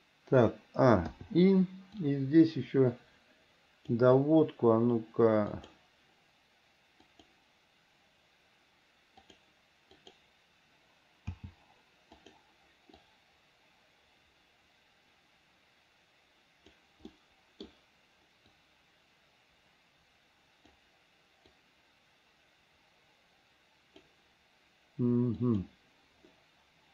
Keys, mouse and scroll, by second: 1.4 i, 2.3-4.2 drag, 5.8 click, 7.3 click, 9.4 click, 10.1 click, 11.5 g, 13.3-17.0 drag, 17.3 middle click, 18.8-21.0 drag, 21.8-24.3 drag, 25.6 click.